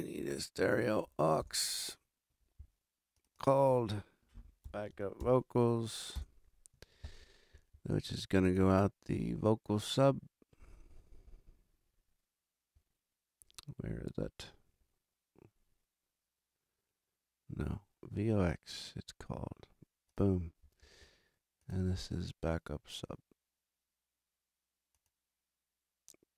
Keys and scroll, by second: 0.2 super+Right, 0.7 super+Down, 1.4 super+Return, 2.1 Return, 4.4-5.7 typing, 6.1 shift+Return.